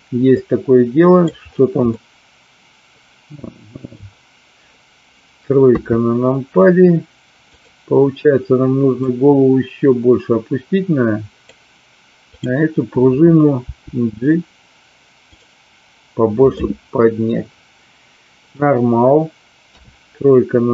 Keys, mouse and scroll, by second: 0.3-1.2 middle drag, 1.9-4.0 middle drag, 5.6 KP_3, 7.5 click, 8.9-11.4 drag, 12.3 click, 13.6 g, 15.2 click, 16.5-18.4 middle drag, 19.5 KP_3.